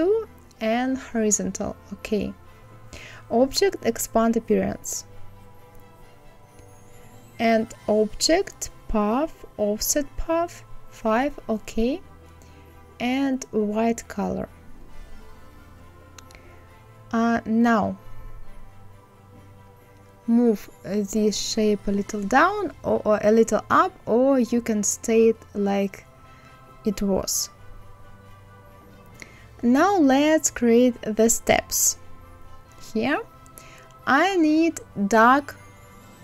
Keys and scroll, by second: 22.7 Up.